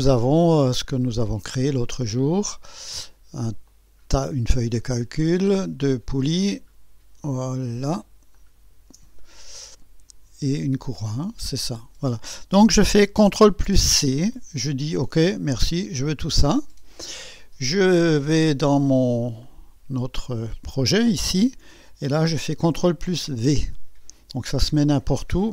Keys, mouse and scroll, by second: 2.4 click, 3.7 ctrl+click, 5.2 ctrl+click, 8.4 ctrl+click, 13.6 ctrl+c, 15.9 click, 19.4 click, 23.3 ctrl+v.